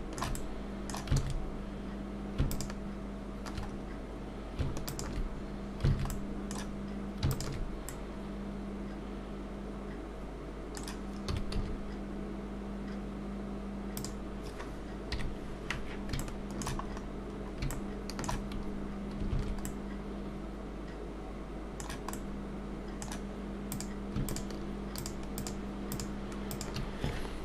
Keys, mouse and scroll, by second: 0.4 middle click, 1.2 alt+a, 2.5 alt+shift+click, 3.7 scroll up 2, 4.8 alt+shift+click, 5.9 alt+a, 6.1 middle click, 7.3 alt+shift+click, 7.9 middle click, 15.1 KP_3, 16.2 shift+middle click, 16.9-17.6 scroll up 4, 17.7 shift+middle click, 19.3 alt+a, 19.7 middle click, 23.7 click, 24.2-26.7 shift+click.